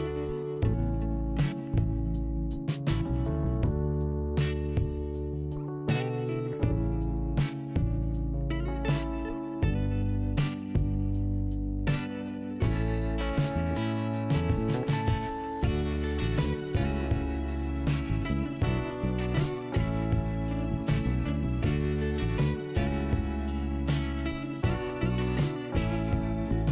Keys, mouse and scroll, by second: 2.0 click, 2.1 click, 3.3 click, 3.4 click, 5.0 click, 8.5 click, 8.6 click, 9.4 click, 9.5 click, 10.4 click, 11.9 scroll up 1, 13.4 scroll down 2, 14.1 click, 16.9 click, 17.0 click, 17.6 scroll down 1, 18.6 click, 23.6 click, 23.7 click, 24.3 scroll down 2, 25.3 click, 25.4 click, 26.1 click.